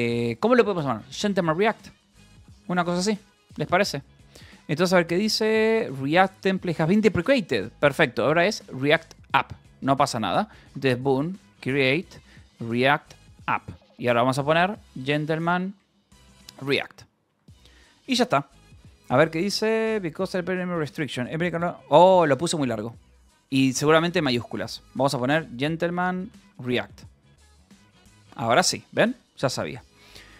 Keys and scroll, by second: 0.7-2.5 typing, 3.4 Return, 10.7-16.5 typing, 16.7 Return, 22.8 Up, 23.1 BackSpace, 24.6-27.1 typing.